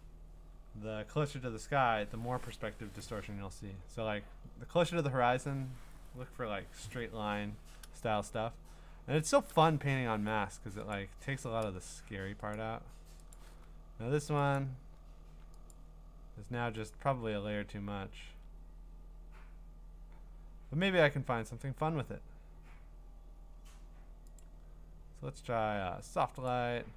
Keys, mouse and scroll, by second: 1.5 click, 8.7-9.8 scroll, 11.1 click, 12.6 click, 13.3 click, 14.6 click, 15.7 click, 24.4 click, 26.5 click.